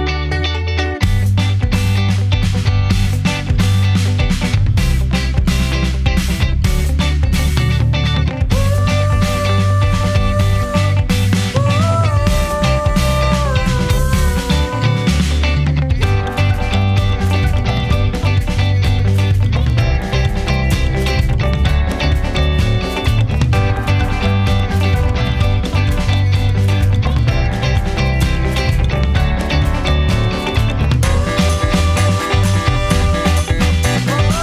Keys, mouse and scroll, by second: 0.8 click, 3.9 click, 4.9 scroll up 1, 6.2 middle click, 8.2 scroll up 1, 8.6 click, 9.4 scroll down 1, 9.6-13.3 middle drag, 13.3 click, 14.5-14.9 scroll up 1, 14.9 click, 16.2 scroll up 1, 16.5 click, 18.8 click, 19.7-20.4 scroll down 1, 22.1 click, 25.8 space, 28.7 Return, 31.1-32.6 scroll down 1, 33.9 click.